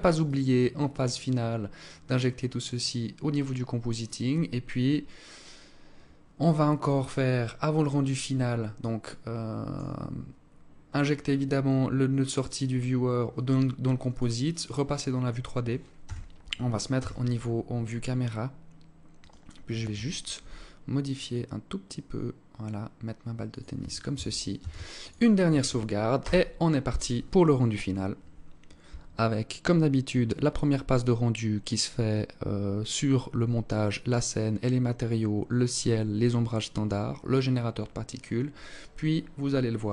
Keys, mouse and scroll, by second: 13.6 click, 14.2-14.7 scroll down 2, 15.0 KP_0, 16.0 KP_0, 16.7 scroll down 1, 18.1 right click, 19.3 g, 23.6 ctrl+s.